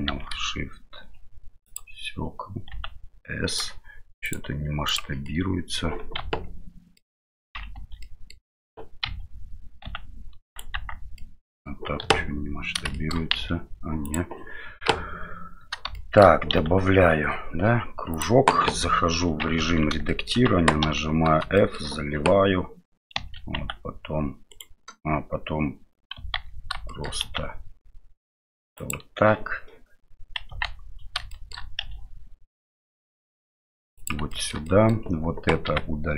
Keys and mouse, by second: 0.1 shift+a, 2.7 s, 4.3 click, 5.3-5.8 middle drag, 6.2 KP_Divide, 7.0 middle click, 7.8 Tab, 8.1 middle click, 9.1 1, 9.8 s, 10.7 Tab, 11.2 middle click, 12.0 KP_7, 13.0 shift+middle click, 13.3 s, 14.8 KP_Divide, 16.0 shift+middle click, 16.5 s, 18.6 KP_7, 19.6 Tab, 20.1 shift+middle click, 20.8 f, 21.6 shift+middle click, 23.1 e, 26.3 ctrl+z, 27.0 middle click, 27.2 s, 30.5 KP_1, 31.3 shift+middle click, 31.8 e, 34.3 shift+middle click, 34.8 middle click, 35.7 x.